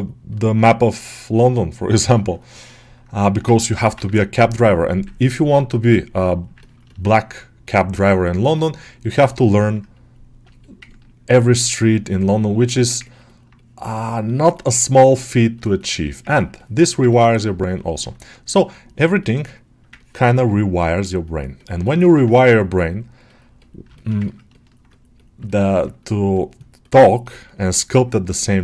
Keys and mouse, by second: 1.2 click, 1.8 alt+middle click, 2.4 alt+middle click, 3.4 alt+shift+middle click, 3.5 shift+middle click, 3.8 ctrl+middle click, 4.9 ctrl+middle click, 6.5 ctrl+middle click, 7.0-9.2 drag, 9.2 ctrl+middle click, 9.4 middle click, 9.8 click, 10.5-11.5 middle drag, 12.6 shift+middle click, 12.9 ctrl+alt+middle click, 13.4-16.2 drag, 16.2 ctrl+middle click, 17.6 middle click, 18.0-19.8 drag, 19.8 ctrl+middle click, 20.2 alt+middle click, 21.1 click, 21.7 alt+middle click, 23.4 click, 23.8 shift+middle click, 24.1 ctrl+middle click, 24.4 alt+middle click, 25.3-27.5 alt+middle drag, 27.6 alt+middle click, 28.4 middle click.